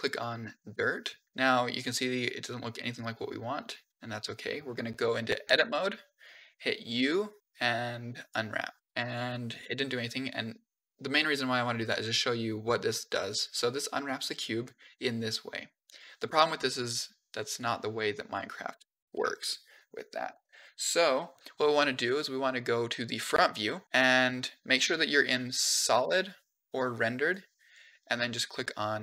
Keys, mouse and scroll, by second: 5.4 Tab, 6.8 u, 8.8 shift+scroll up 9, 9.0 shift+middle click, 9.4-11.0 shift+scroll up 4, 11.0 click, 17.4 click, 19.0 KP_1, 23.7 click, 24.7 z, 25.9 z, 27.1 click.